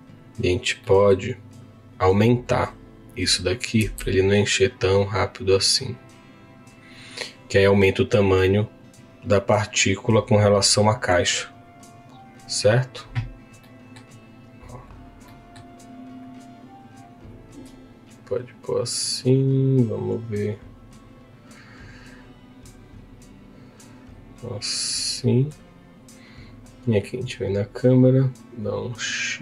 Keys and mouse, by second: 0.8 middle click, 1.6 click, 2.4 click, 3.8 s, 12.3-13.3 drag, 13.6 middle click, 15.2 middle click, 16.4 click, 27.8-29.4 drag.